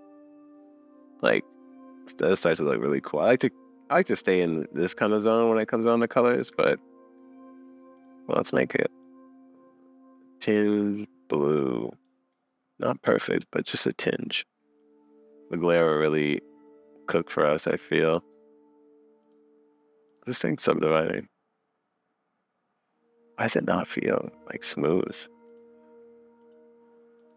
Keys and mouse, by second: 6.5 super+z, 14.1 click, 15.9 click, 18.0 super+s, 23.8 click, 25.2 click, 26.5 click.